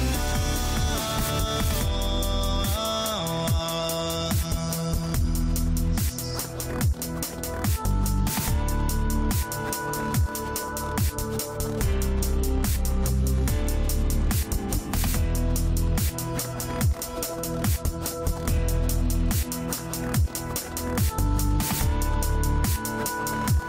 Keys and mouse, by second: 0.3 middle drag, 1.3 middle click, 2.2 middle click, 9.3 click, 10.5 click, 12.4-13.7 drag, 14.8-15.7 drag, 17.7 click, 18.7 click, 19.5 right click, 21.8 click.